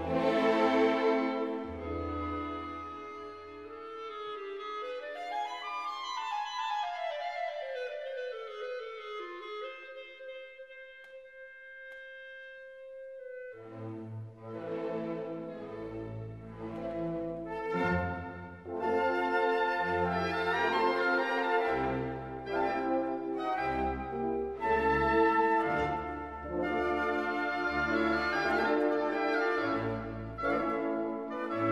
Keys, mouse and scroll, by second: 0.3-8.1 typing, 0.4 right click, 0.5 alt+click, 0.8 alt+click, 0.9 click, 1.5 right click, 1.5 click, 1.6 click, 2.0 right click, 2.2 click, 2.7 click, 2.8 right click, 2.8 click, 3.1 click, 3.3 middle click, 3.3 click, 4.1 click, 4.3 click, 4.5 click, 4.6 shift+right click, 4.9 click, 5.7 scroll up 1, 6.4 click, 6.6 click, 7.2 alt+click, 7.7 click, 11.4 click, 11.7 right click, 11.8 ctrl+click, 12.3-14.6 typing, 13.1 scroll down 1, 13.4 scroll up 1, 13.6 click, 13.9 click, 14.1 scroll down 1, 14.3 click, 14.7 click, 14.8 F3, 14.9 click, 15.0 F3, 15.1 click, 15.7 click, 16.2 alt+middle click, 16.5 alt+click, 16.6 scroll down 1, 17.1 alt+Num_Lock, 17.1 alt+click, 17.5 shift+right click, 17.6 space, 17.7 scroll up 1, 17.9 right click, 18.0 r, 18.1 click, 18.2 scroll down 1, 18.3 w, 18.3 click, 18.5 space, 18.8 click, 19.2 scroll down 1, 19.4 click, 20.1 click, 20.3-23.0 typing, 20.4 click, 20.8 scroll down 1, 20.9 click, 21.6 alt+scroll up 1, 21.7 shift+right click, 21.8 click, 22.7 right click, 22.8 click, 23.1 scroll up 1, 23.2 right click, 23.3 click, 23.7 alt+click, 23.9 alt+scroll up 1, 24.1 alt+click, 24.7 click, 26.5 alt+click, 26.8 right click, 26.8-28.9 typing, 27.2 right click, 27.5 click, 27.8 click, 28.3 click, 28.4 right click, 28.6 click, 29.1 click, 29.2 scroll down 1, 29.3 middle click, 29.7 right click, 30.3 right click, 30.6 scroll down 1, 30.7 middle click, 30.9 click, 31.0 3, 31.1 right click, 31.1 click, 31.2 scroll down 1, 31.4 click, 31.6 click.